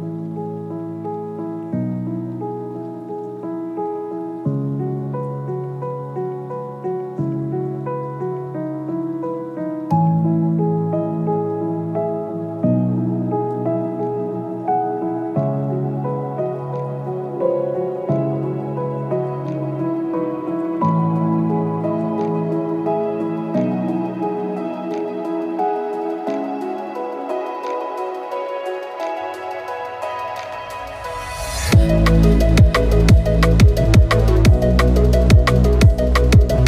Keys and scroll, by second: 7.0 ctrl+KP_0, 7.8 ctrl+KP_Subtract, 17.3 ctrl+z, 18.3 ctrl+z, 19.8 w.